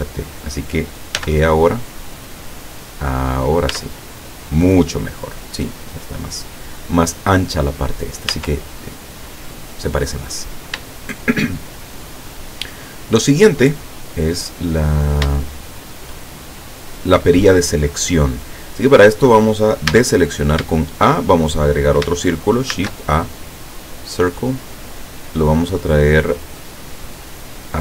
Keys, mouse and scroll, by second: 1.2 e, 3.4 click, 3.8 Tab, 4.2 middle click, 5.2 scroll down 1, 5.8 middle click, 6.5 scroll down 1, 6.9 middle click, 8.4 Tab, 9.0-10.4 middle drag, 11.0 shift+middle click, 12.6 scroll up 2, 14.4-15.4 middle drag, 15.4 shift+middle click, 16.1 shift+scroll up 2, 18.5-18.9 scroll down 2, 20.0 a, 20.4-20.7 scroll down 1, 20.8 shift+middle click, 22.7 shift+a, 24.0 click, 27.0 click.